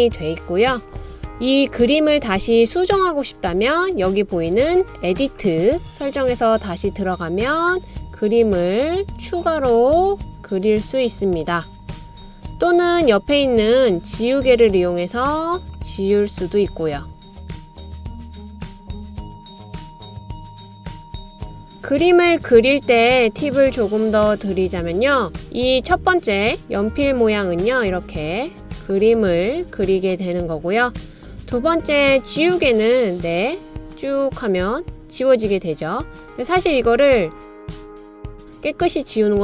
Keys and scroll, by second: 21.3 BackSpace.